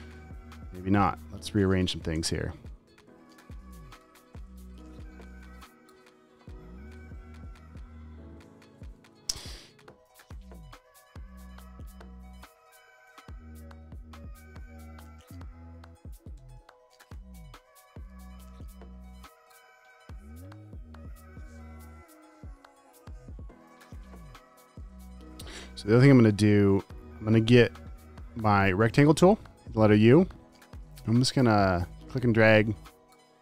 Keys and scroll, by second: 1.5 super+x, 2.4 Delete, 3.0 Down, 3.6 Up, 4.3 Return, 4.5 super+v, 5.7 v, 10.2 super+t, 11.8 t, 12.3 super+a, 16.9 v, 22.1 space, 22.6 super+space, 23.0 v, 24.6 space, 25.0 space, 27.8 u.